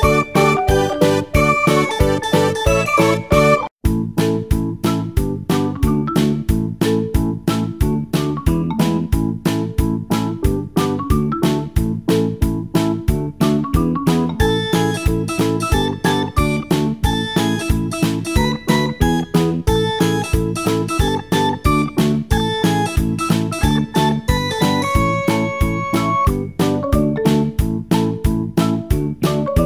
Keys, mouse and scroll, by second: 6.0 r, 17.9 click, 19.1 click, 24.7-25.8 scroll down 1, 25.9-27.6 shift+middle drag, 27.6-28.4 scroll down 1, 28.4-29.6 shift+middle drag.